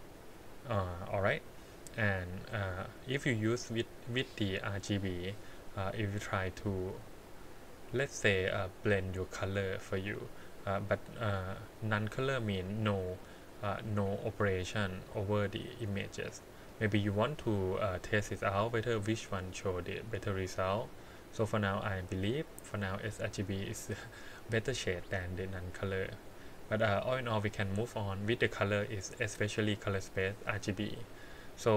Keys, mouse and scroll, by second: 2.7-6.3 drag, 7.8-9.4 scroll up 3, 9.4-12.0 drag, 15.8-16.6 scroll down 2, 16.6-17.6 middle drag, 20.9-23.0 drag, 25.5-26.5 scroll down 3, 26.5 scroll up 1, 27.1 middle click, 27.7 scroll up 2, 28.2 middle click, 31.3 click.